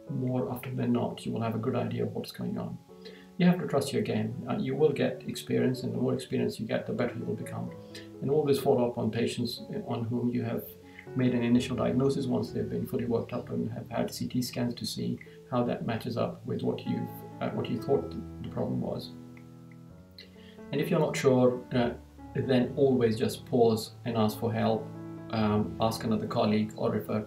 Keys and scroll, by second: 2.2 Right, 18.8 Right.